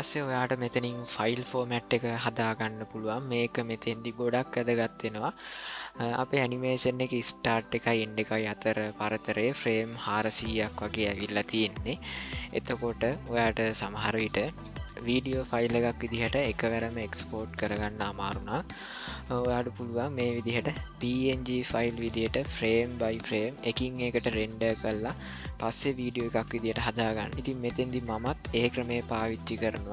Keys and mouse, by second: 15.0-29.9 drag.